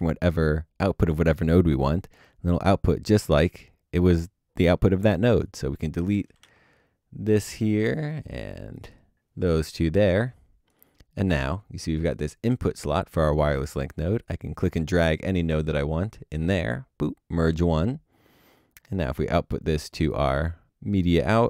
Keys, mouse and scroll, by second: 6.4 Return, 6.5 Delete.